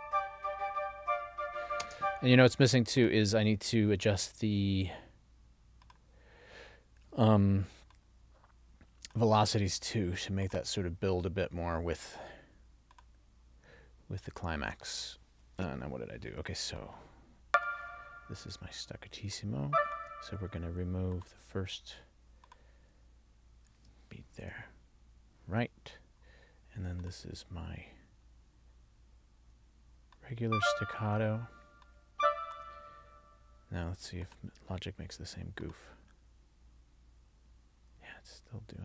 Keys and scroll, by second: 2.0 space.